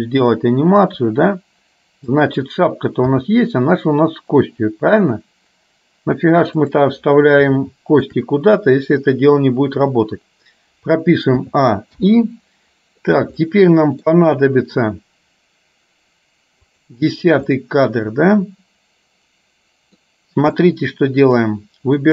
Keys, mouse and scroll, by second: 1.1 r, 3.1 g, 7.8 shift+middle click, 11.4 a, 12.1 i, 13.4 middle click, 16.8 click, 17.7-20.1 middle drag, 20.8 middle click.